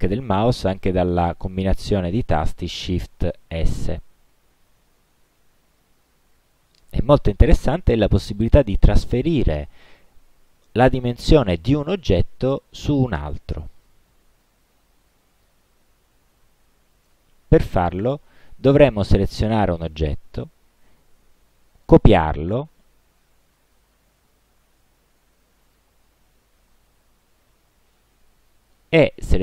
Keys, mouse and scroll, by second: 3.7 shift+s, 14.7-15.7 drag, 16.5-17.2 drag, 17.6 click, 25.7 click.